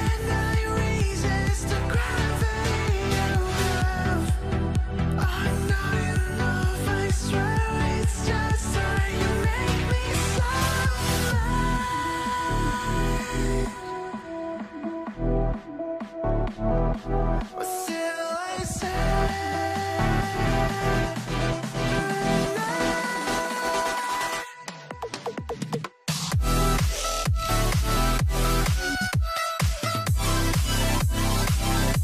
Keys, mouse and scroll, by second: 1.0 alt+middle click, 1.2 alt+scroll up 2, 3.9 scroll down 1, 4.1 middle click, 4.5-4.9 scroll up 1, 5.1 scroll down 1, 5.1 middle click, 5.5-6.0 scroll up 1, 6.0 middle click, 6.3-7.3 scroll down 1, 10.0-11.3 typing, 11.6 double click, 13.5-14.5 typing, 14.4 middle click, 14.5 scroll down 1, 14.9 middle click, 15.8 scroll up 1, 17.2 middle click, 17.5 middle click, 18.7 scroll up 1, 19.9 scroll up 1, 20.0 middle click, 21.8 ctrl+z, 25.0 ctrl+z, 26.8 ctrl+z, 26.9 alt+middle click, 27.4 alt+middle click, 28.2 alt+middle click, 28.4 scroll up 1, 28.5 middle click, 31.9 scroll up 1.